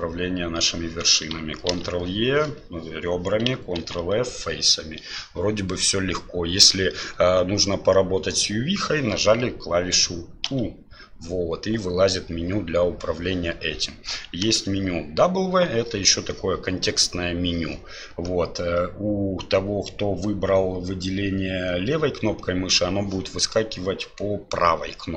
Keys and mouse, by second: 1.7 ctrl+e, 3.8 ctrl+f.